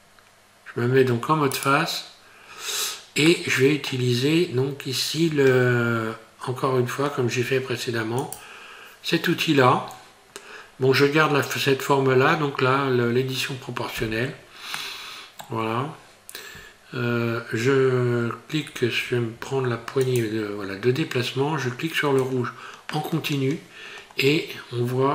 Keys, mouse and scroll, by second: 1.6 right click, 2.5-3.3 scroll down 3, 3.3 middle click, 8.2 click, 14.8 middle click, 20.0 click, 22.2 click.